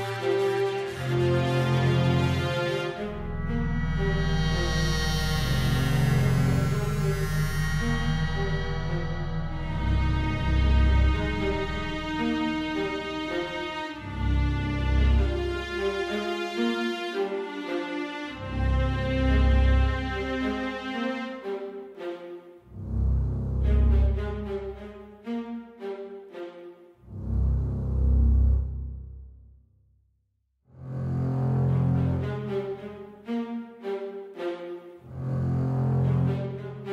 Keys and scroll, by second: 7.7 super+z, 10.7 Page_Up, 10.9 Page_Up, 11.2 Page_Down, 29.6 Page_Down.